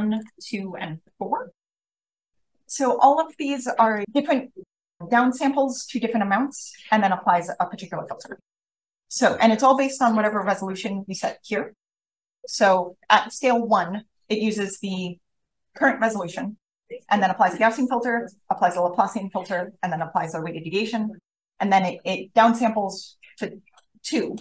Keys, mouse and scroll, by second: 0.1 click, 1.0-2.6 drag.